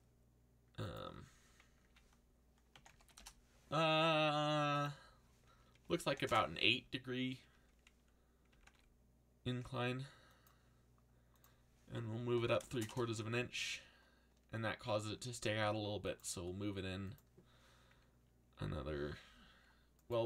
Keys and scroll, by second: 1.9-3.5 typing, 5.5-6.5 typing, 8.2-9.1 typing, 11.9-13.2 typing, 15.2-16.2 typing.